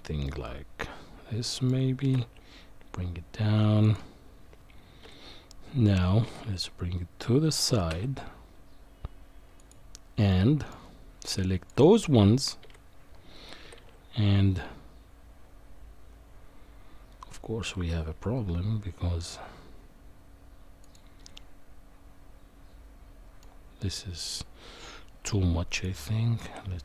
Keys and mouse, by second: 0.2-1.7 middle drag, 2.0 g, 5.0 KP_1, 6.2 g, 10.3 middle click, 11.4 click, 12.6 KP_1, 13.6 g, 21.3-23.4 middle drag, 25.8 shift+click.